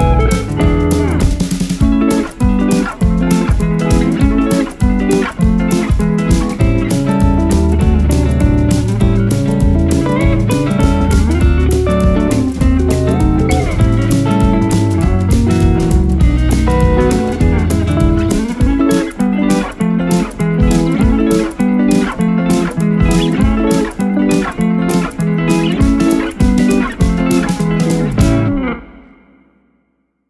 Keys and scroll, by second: 1.2 ctrl+8.